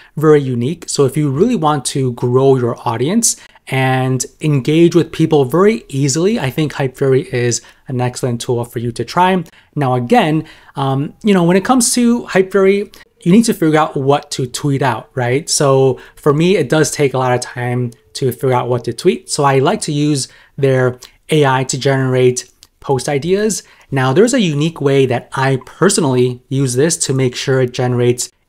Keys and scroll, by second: 19.8 super+m.